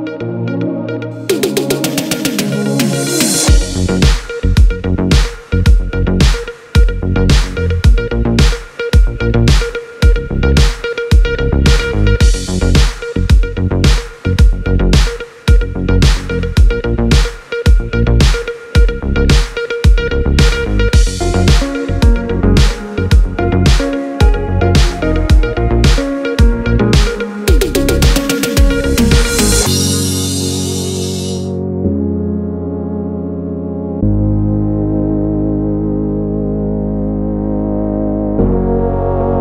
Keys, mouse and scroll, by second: 2.1 click, 3.6 F4, 4.5 click, 5.8 F9, 8.0 click, 11.5-12.1 scroll down 1, 12.1 scroll up 1, 12.8-14.3 scroll down 1, 14.3 click, 15.5 click, 19.0 click, 20.3 F4, 21.3 F9, 25.6 click, 26.7 ctrl+o, 28.2-29.9 scroll down 1, 30.8 click, 32.0 click, 35.3 click, 37.2 F4.